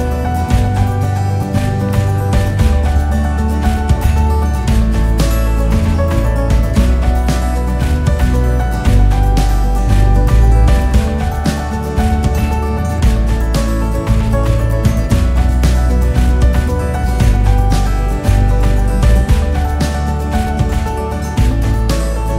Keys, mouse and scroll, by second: 1.0 g, 11.3 click, 12.8 click, 12.8 scroll up 6, 13.7 scroll down 2, 14.5-22.3 typing, 18.3 scroll down 2, 20.2 click.